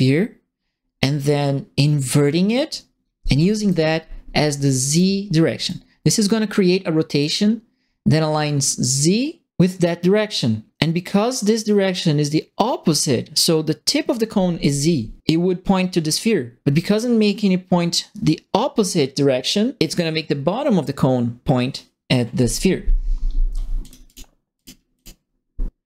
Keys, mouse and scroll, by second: 3.3 click, 4.8 click, 5.6-7.2 drag, 23.8 click, 24.0 click, 24.5 click, 24.9 click.